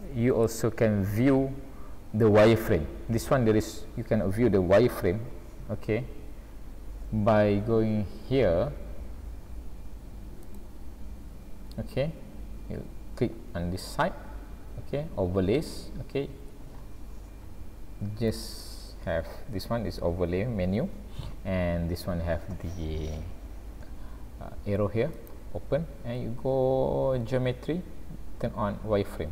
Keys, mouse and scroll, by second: 0.7-1.3 scroll down 2, 1.8 scroll up 1, 2.4 scroll up 1, 10.5 click.